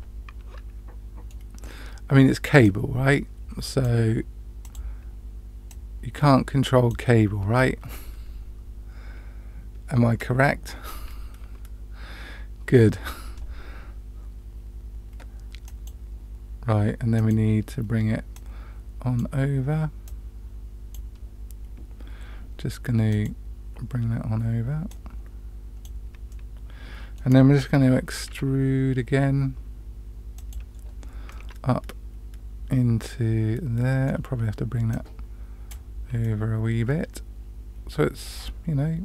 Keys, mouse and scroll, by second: 2.6-3.8 drag, 4.6 click, 5.6-6.9 drag, 7.5 scroll up 1, 7.5-10.7 middle drag, 15.6 click, 17.1 click, 18.3 click, 20.0 click, 23.1 click, 24.8 click, 26.3 middle click, 28.2 e, 31.3-34.0 middle drag, 34.9 click, 36.2-39.0 middle drag.